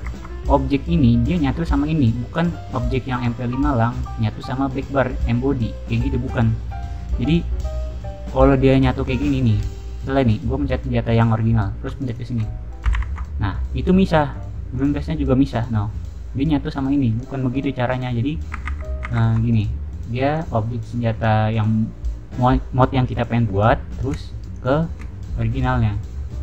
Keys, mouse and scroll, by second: 7.2 click, 8.6 click, 9.0 click, 9.3 click, 10.6 middle click, 12.0 shift+click, 12.9 ctrl+j, 14.7 click, 18.6 ctrl+z, 19.0 ctrl+z, 19.4 click, 20.2 click, 24.5 shift+click.